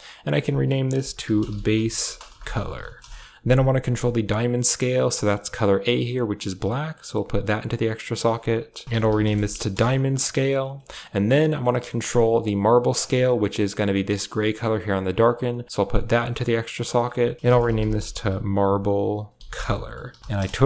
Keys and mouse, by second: 0.1-2.9 drag, 5.7-6.8 drag, 7.0 click, 7.9 click, 8.0 click, 8.8 click, 10.7 middle click, 11.0 click, 11.3 middle click, 11.8 middle click, 12.2 g, 13.2 drag, 15.0 drag, 15.2-15.6 drag, 16.1 click, 16.6 click, 16.7-20.2 drag.